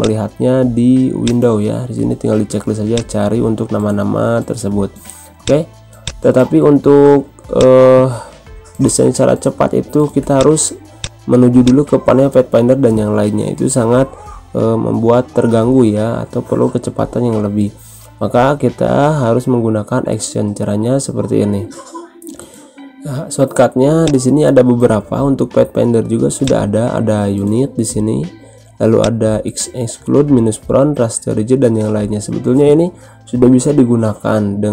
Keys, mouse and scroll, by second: 5.4-10.3 drag, 26.4-28.9 drag, 33.3-33.8 scroll up 1, 33.8 scroll down 1.